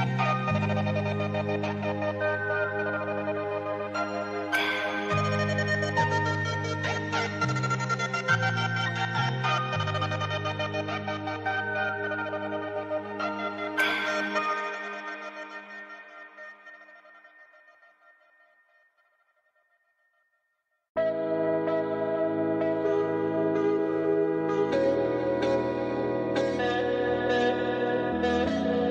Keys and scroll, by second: 15.9 v, 18.0 ctrl+2, 24.6 shift+Right, 26.5 shift+Right, 27.3 shift+Left.